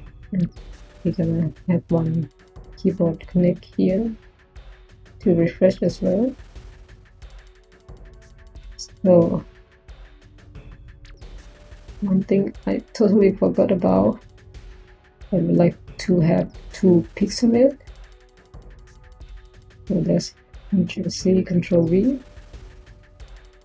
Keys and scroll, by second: 6.5 1, 9.3 1, 20.7 ctrl+c, 21.1 ctrl+v.